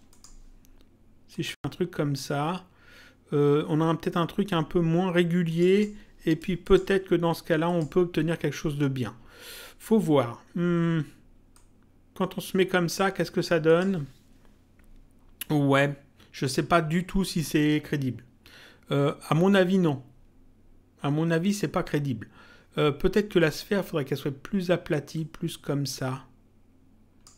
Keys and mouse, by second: 1.3 click, 5.4 click, 11.5 click, 13.6 click, 23.3 click, 25.1 click.